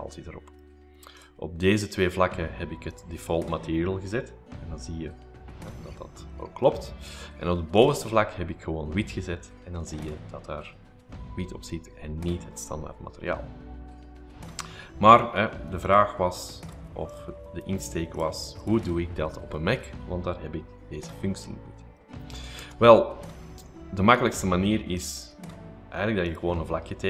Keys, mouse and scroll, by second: 1.3 click, 2.9 click, 6.3-7.2 scroll up 2, 7.8 click, 15.9 click, 16.9 click, 17.7 click, 18.2-19.3 drag, 19.3-20.1 scroll up 3, 20.0 middle click, 22.0 shift+middle click, 22.2 scroll up 2, 22.4 shift+middle click, 22.6 space, 24.2 r, 25.0 click, 25.7 click, 26.3 click.